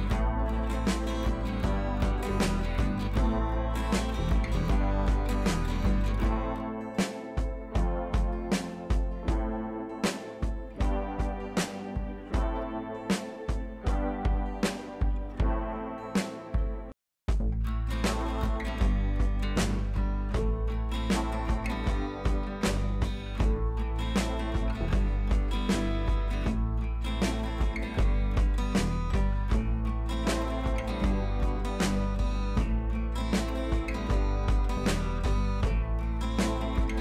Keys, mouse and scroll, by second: 3.4-5.8 drag, 6.0 ctrl+c, 6.3 click, 6.9 t, 7.2 click, 7.8 ctrl+v, 9.9-12.4 drag, 18.2-18.9 scroll down 1, 23.2-25.9 scroll down 1, 29.2-30.4 drag, 33.4-33.9 scroll down 1, 34.0 ctrl+t, 34.6-35.2 alt+drag.